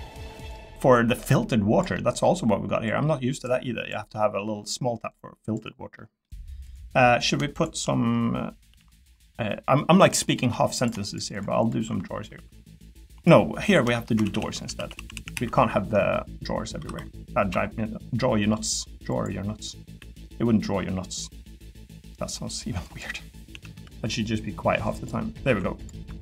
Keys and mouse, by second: 1.9 middle click, 2.9 click, 5.2 click, 5.9 middle click, 6.6 click, 8.7 ctrl+r, 10.4 3, 12.3 i, 12.4 i, 13.7 click, 14.2-15.4 ctrl+z, 16.8 i, 16.9 i, 17.5 i, 19.5 click, 20.0 e, 22.8 click, 23.5 a, 23.7 g, 25.4 Tab, 25.8 click.